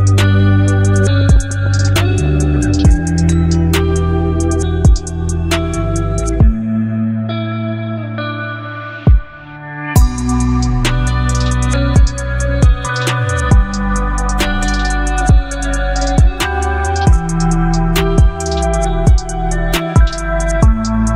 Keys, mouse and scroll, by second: 5.3 click, 6.7 v, 8.1-15.1 drag, 15.1-21.1 alt+drag.